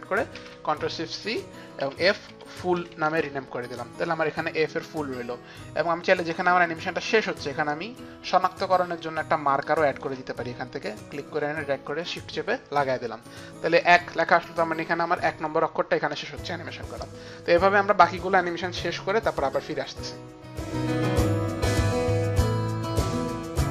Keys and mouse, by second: 0.5 ctrl+shift+c, 0.5 shift+click, 1.8-3.2 typing, 3.2 Return, 4.8 click, 6.0 space, 6.0 f, 8.6 click, 10.1 shift+click, 21.1 click, 21.2 click, 21.3 click, 21.5 Up, 21.6 click, 21.7 click, 22.4 shift+Page_Down, 22.4 click, 22.5 click, 22.8 click, 23.0-23.7 typing, 23.1 click, 23.4 click.